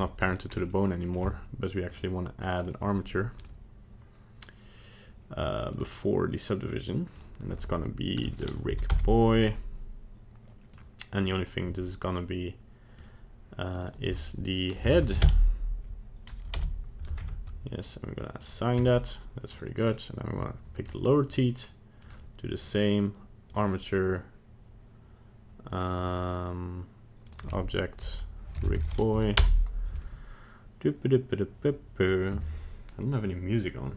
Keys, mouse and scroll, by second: 0.2 middle click, 0.5 scroll up 3, 0.7 middle click, 1.9 click, 2.7 click, 5.7 click, 7.1 click, 10.7 click, 12.9 click, 13.7 click, 13.8 click, 16.5 Return, 17.2 Tab, 18.4 click, 18.8 Tab, 19.5 right click, 19.9 right click, 22.0 click, 22.6 click, 25.9 click, 27.2 click.